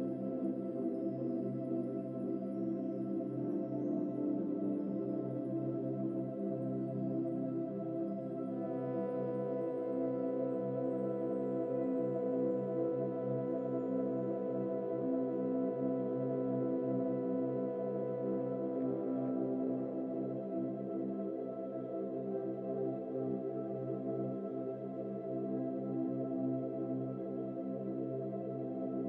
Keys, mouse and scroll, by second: 1.0 ctrl+s, 1.6 scroll down 4, 1.8-3.1 middle drag, 3.1 scroll up 4, 3.4 scroll down 2, 4.5 scroll down 1, 4.8 scroll up 1, 5.1 scroll down 1, 5.3 scroll up 1, 5.7 click, 6.7-8.1 drag, 8.1 Tab, 9.5 a, 10.4 a, 11.1 u, 13.5-14.9 drag, 14.9 Tab, 15.5-18.4 drag, 19.3-20.4 drag, 23.3 shift+middle click, 23.9 click, 24.8-27.0 middle drag, 27.0 click, 27.9-28.9 shift+middle drag, 28.9 click.